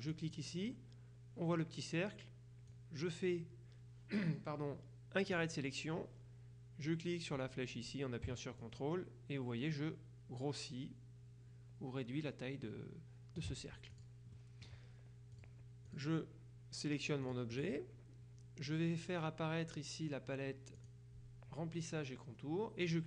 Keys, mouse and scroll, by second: 0.2 click, 2.8-5.9 drag, 8.7-14.0 ctrl+drag, 14.1 click, 15.5 click, 17.3 click, 20.9 click.